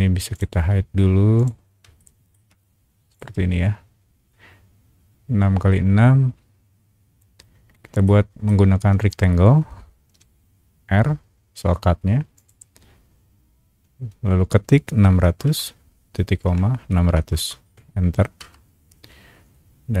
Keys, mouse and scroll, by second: 0.3-1.3 right drag, 1.3 click, 2.0 shift+middle click, 2.5 scroll up 1, 3.1 shift+click, 8.0 shift+middle click, 10.1 r, 12.3 click, 15.0 KP_6, 15.2 KP_0, 16.4 ;, 16.9 KP_6, 17.1 KP_0, 18.4 KP_Enter.